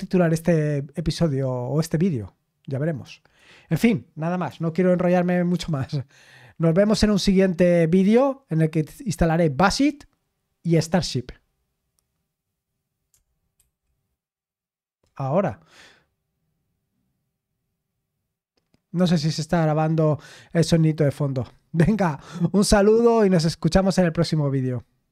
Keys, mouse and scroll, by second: 5.5 super+x, 13.5 super+x.